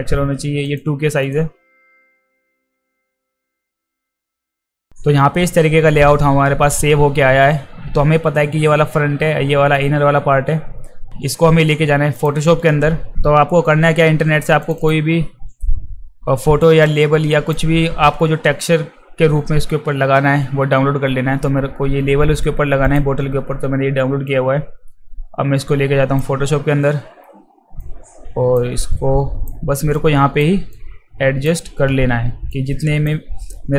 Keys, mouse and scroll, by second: 0.7 drag, 1.2 drag, 1.6 click, 1.9 click, 2.4 click, 2.6 ctrl+v, 3.1 click, 3.3 click, 3.5 click, 3.8 space, 4.7 click, 5.5 click, 5.6 click, 12.1 click, 14.6 click, 14.8 click, 16.8 click, 22.8 click, 24.3-26.2 drag, 27.8 alt+click, 28.8 click, 30.0 alt+click, 30.7 click, 32.4 alt+click.